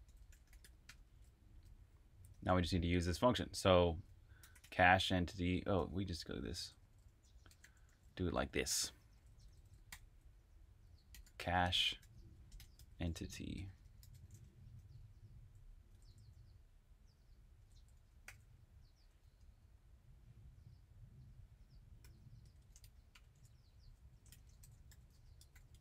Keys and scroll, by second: 0.0-2.2 typing, 4.1-14.9 typing, 17.3-18.0 typing, 20.0 typing, 21.7-25.8 typing.